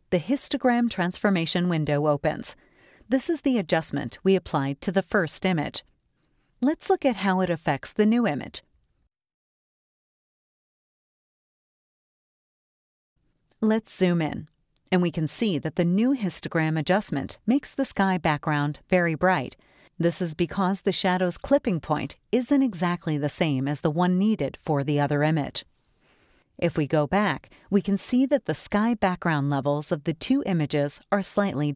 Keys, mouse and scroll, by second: 0.6 click, 3.8-4.9 drag, 6.0 middle click, 6.0 click, 8.9 click, 12.1 click, 14.7 click, 15.8 KP_5, 16.0 KP_0, 20.1 click, 26.3 click, 28.2 right click, 29.5 click, 31.5 click.